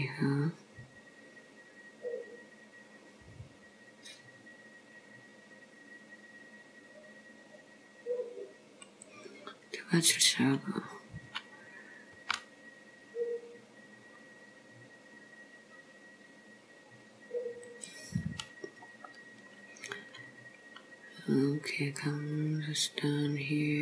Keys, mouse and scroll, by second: 12.2 g, 18.3-19.3 scroll down 2, 19.3 scroll up 2.